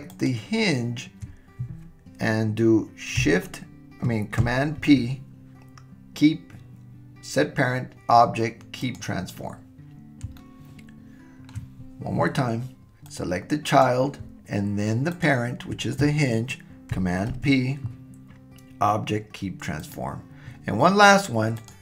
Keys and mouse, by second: 0.1 shift+click, 4.8 super+p, 10.4-11.6 shift+middle drag, 13.1-14.0 drag, 17.3 super+p, 21.6 click.